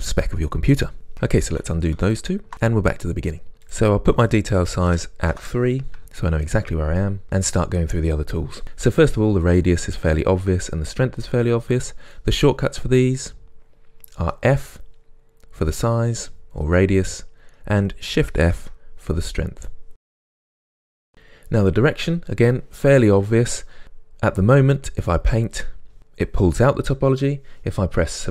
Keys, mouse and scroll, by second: 1.6 ctrl+z, 3.5-17.5 drag, 5.5 Return, 14.3 f, 18.6 shift+f, 19.9 f, 20.2 click, 20.7-25.0 middle drag, 25.0-28.3 drag.